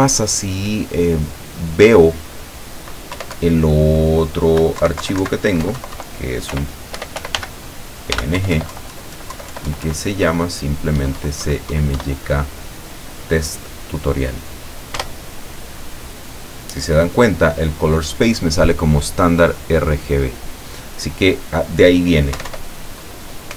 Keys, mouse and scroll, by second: 3.2 Up, 3.4 Left, 4.9 Right, 5.7 Delete, 6.6-8.2 typing, 8.4 Left, 11.0 Delete, 15.0 Return, 22.4 Up.